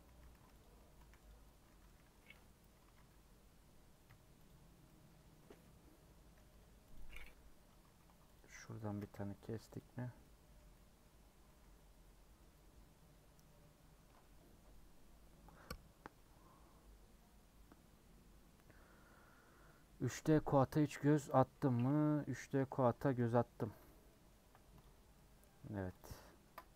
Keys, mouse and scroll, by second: 0.0-1.2 typing, 0.6 click, 1.9 middle click, 2.3 ;, 2.8 a, 4.5 u, 4.9-6.9 middle drag, 6.9 click, 7.9 ctrl+z, 8.3 click, 8.9 a, 9.8 u, 10.1 scroll down 1, 10.2-20.9 middle drag, 20.9-21.8 scroll down 2, 21.8 /, 22.5 middle click, 22.8 Tab, 23.6 middle click, 24.4 h, 24.8 click, 25.1 middle click, 25.4 Tab, 25.7 3, 26.0 click, 26.3-26.7 ctrl+shift+middle drag.